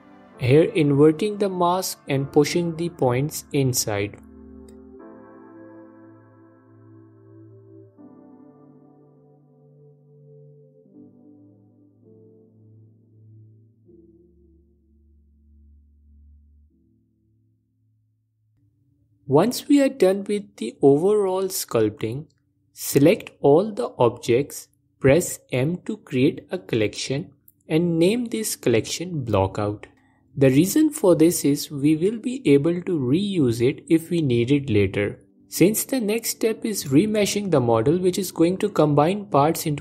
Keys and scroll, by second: 1.6 ctrl+i, 2.8 g, 3.0 f, 9.7 alt+m, 11.1 f, 13.0 f, 15.5 ctrl+Tab, 17.4 ctrl+z, 17.5 s.